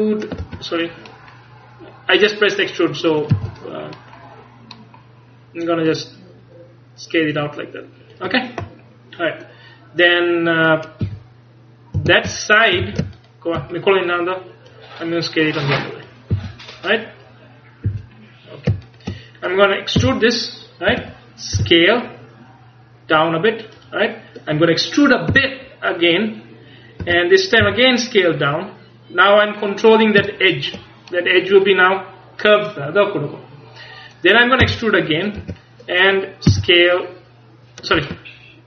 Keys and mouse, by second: 2.7 click, 3.4 z, 4.0 middle click, 5.9-7.9 drag, 11.1 z, 12.0 a, 12.4 click, 12.9 a, 16.6 a, 17.9 z, 20.1 e, 21.6 s, 23.9-25.7 drag, 25.4 e, 27.7 s, 29.4 click, 34.7 e, 36.6 s.